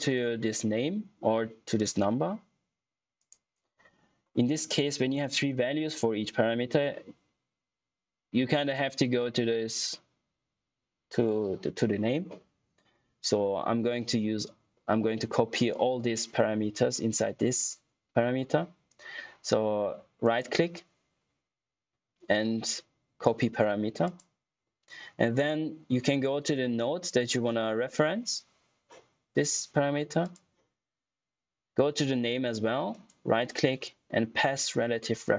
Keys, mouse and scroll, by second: 1.7 right click, 22.0 typing, 24.0 click, 24.0 typing, 30.1 click.